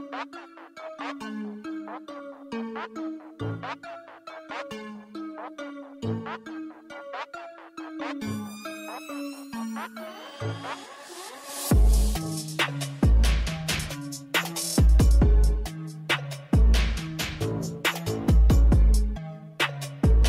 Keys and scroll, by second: 1.8-4.5 typing, 5.7-7.1 typing, 5.8 Return, 14.4 ctrl+alt+0.